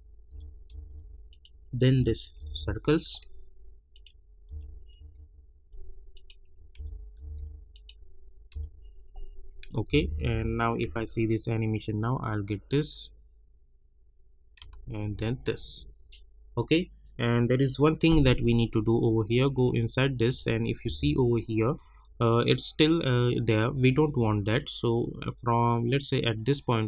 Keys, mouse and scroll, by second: 0.3 [, 0.6 Page_Down, 1.3 click, 1.9 [, 2.3 Page_Down, 2.9 click, 4.4 [, 4.9 Page_Down, 6.1 click, 6.7 [, 7.1 Page_Down, 7.7 click, 8.5 [, 8.8 scroll down 1, 9.8 -, 10.0 -, 10.2 -, 10.8 space, 14.5 space, 15.4 scroll up 1, 19.3 click, 20.8 u, 21.7-26.8 drag.